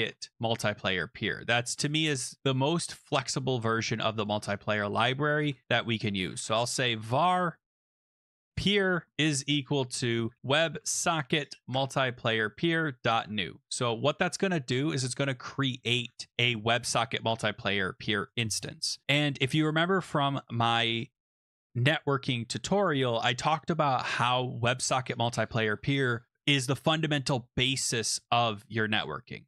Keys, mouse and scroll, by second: 1.8 click, 2.4 click, 4.2 click, 5.4 Return, 6.0-14.1 typing, 11.7 Tab, 14.2 Tab, 15.6-16.4 typing, 15.9 scroll.